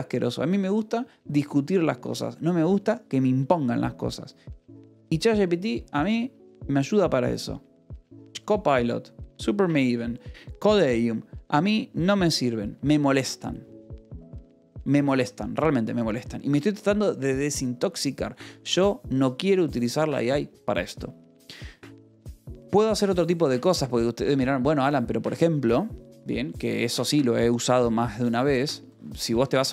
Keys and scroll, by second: 13.2 Escape, 14.8 a, 16.1 Escape, 24.2 a, 25.1 Escape, 26.2 u, 28.0 :, 28.7 j, 29.2 Return.